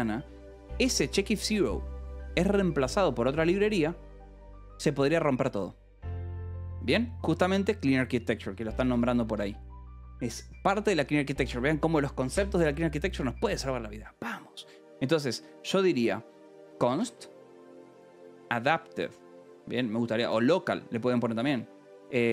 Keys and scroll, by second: 1.1 Escape, 7.6 a, 8.3 Return, 8.7 Escape, 8.9 k, 9.2 a, 9.3 Return, 16.5-19.8 typing, 22.1-22.3 typing.